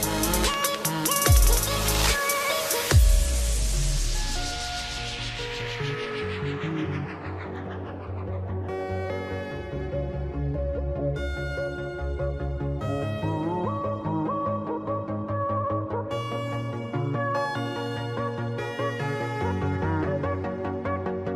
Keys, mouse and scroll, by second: 1.0 click, 2.4 click, 3.0 right click, 4.7 click, 5.5 click, 6.9 click, 8.5 click, 9.3 click, 10.1 click, 11.0 click, 12.5 click, 14.2 click, 14.9 ctrl+click, 15.8 click, 17.5 click, 20.1 click, 21.2 click.